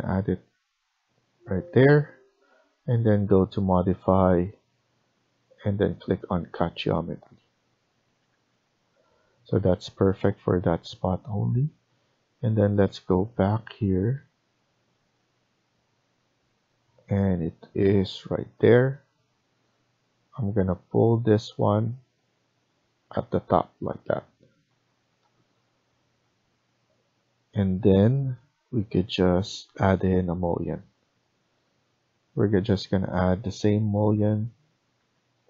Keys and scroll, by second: 1.5 Escape, 1.8 Escape, 4.0 Escape, 8.1 Escape, 8.2 Escape, 24.6 Escape, 34.9 Escape.